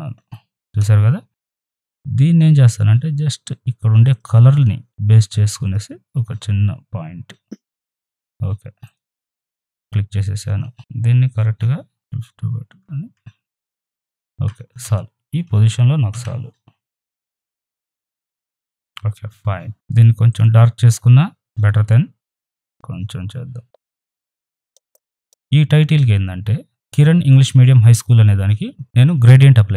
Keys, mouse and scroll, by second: 1.7 click, 4.0 click, 5.6 click, 7.8 click, 8.4 click, 11.6 ctrl+t, 11.9 ctrl+z, 12.2-16.1 alt+drag, 16.1 v, 17.0 right click, 17.1 click, 17.4 shift+Down, 17.6 Up, 18.5 right click, 18.5 click, 20.3 click, 22.5 click, 24.4 click, 24.9 ctrl+z, 25.0 right click, 25.1 click, 25.7 right click, 25.9 click.